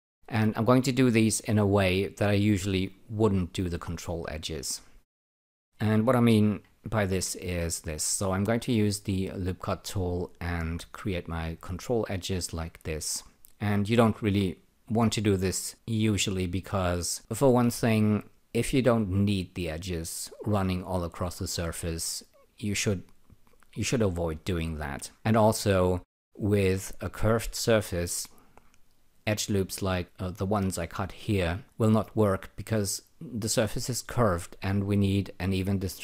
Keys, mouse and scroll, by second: 3.4 ctrl+click, 4.9 alt+shift+click, 6.7-7.6 typing, 8.9-9.7 typing, 9.6 click, 11.5 click, 12.4 click, 14.0 click, 15.7 click, 17.1 click, 25.8 alt+click.